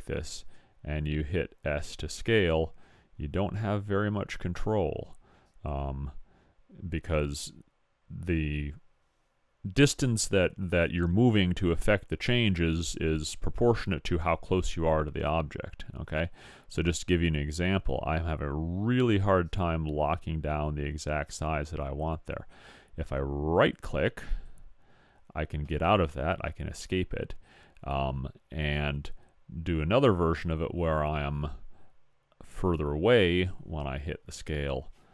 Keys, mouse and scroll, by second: 1.1 s, 34.3 s.